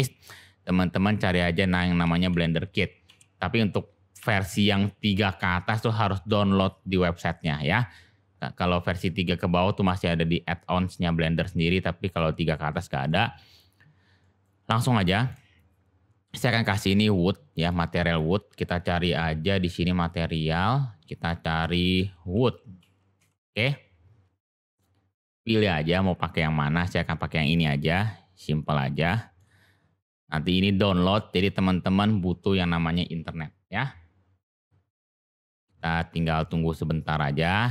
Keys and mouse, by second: 12.8 middle drag, 14.2 middle drag, 15.0 shift+middle drag, 15.5 click, 18.0-20.3 drag, 20.5 click, 21.1-24.7 drag, 22.4 o, 28.9-29.4 shift+middle drag.